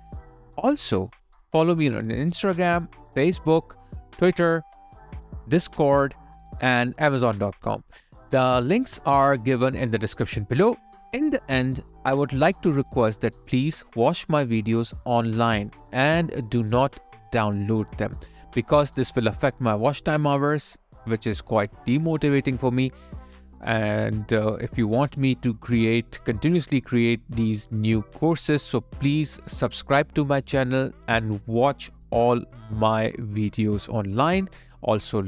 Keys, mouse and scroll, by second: 0.1 double click, 30.5 space.